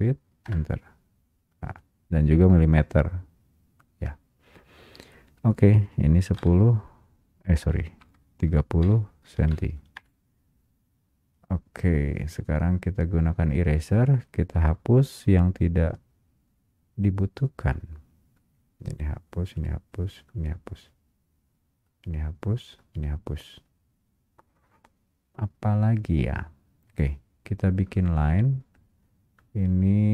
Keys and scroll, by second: 0.6 Return, 10.0 Return.